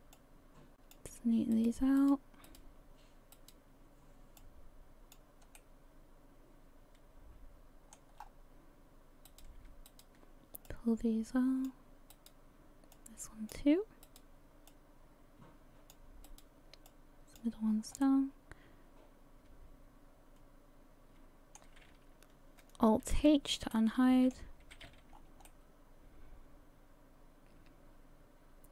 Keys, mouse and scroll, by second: 0.2 click, 1.5 right click, 2.0 right click, 2.4 right click, 3.3 right click, 4.4 click, 5.6 middle click, 8.2-8.6 scroll up 4, 9.3 right click, 9.9 shift+right click, 10.7 click, 12.1 right click, 12.9 click, 14.0 right click, 14.7 click, 16.3 right click, 16.9 click, 17.6-18.0 scroll down 5, 18.0 middle click, 23.1 alt+h, 23.7 middle click, 24.6 a, 24.8 a, 25.1 scroll down 4, 25.5 middle click.